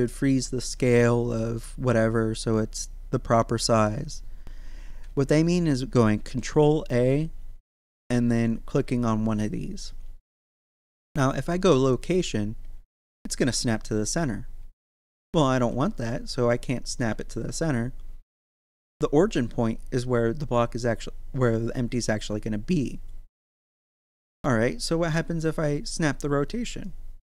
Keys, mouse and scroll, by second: 6.1 ctrl+a, 12.1 click, 12.9 z, 15.4 ctrl+z, 18.3-22.1 middle drag, 22.1 z, 24.1 middle click, 24.8 ctrl+a, 26.7 click.